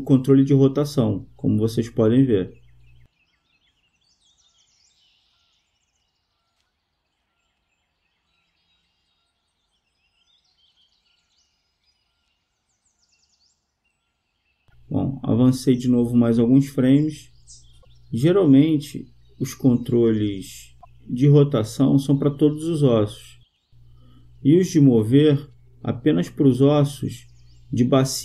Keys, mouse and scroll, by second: 4.2-5.6 right drag, 4.9-6.7 drag, 6.7-8.2 right drag, 8.2-10.0 drag, 10.0-11.1 right drag, 11.1 click, 11.3-12.7 drag, 11.3 right click, 13.3-14.4 drag, 18.8-20.5 right drag, 19.8-22.7 drag.